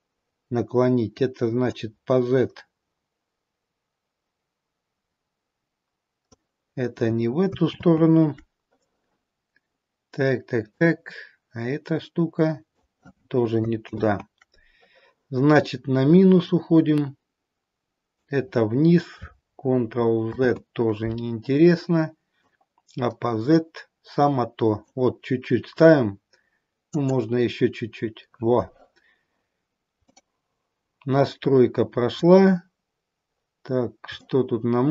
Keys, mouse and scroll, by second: 1.5 click, 8.1 ctrl+z, 10.6 click, 14.3 ctrl+z, 16.3 click, 20.7 ctrl+z, 22.2 click, 26.8 click, 29.5-29.9 scroll down 2, 30.1 middle click, 32.5-33.3 scroll up 4, 33.6 scroll down 1, 34.3 shift+middle click.